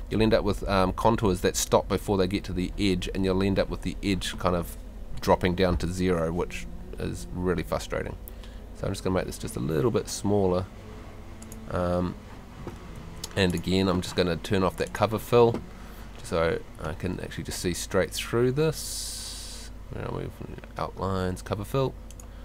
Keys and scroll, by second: 13.0 Home.